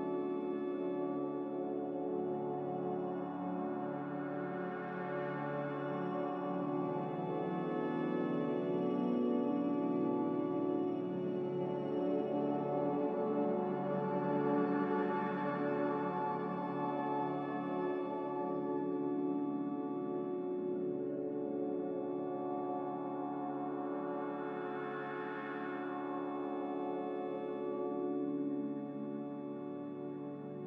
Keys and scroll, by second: 3.5 z, 4.9-5.8 typing, 7.6 typing, 10.5-10.9 typing, 12.3-13.1 typing, 23.2 c, 26.7 ctrl+z, 29.1 z.